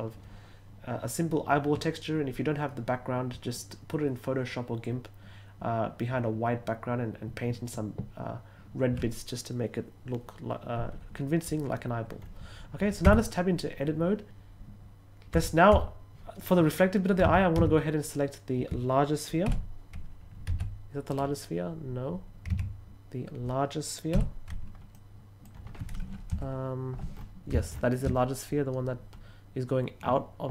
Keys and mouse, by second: 13.0 Tab, 15.3 Tab, 17.1 a, 17.5 a, 19.4 l, 20.4 g, 21.0 right click, 22.4 a, 24.0 l, 24.8-25.3 middle drag.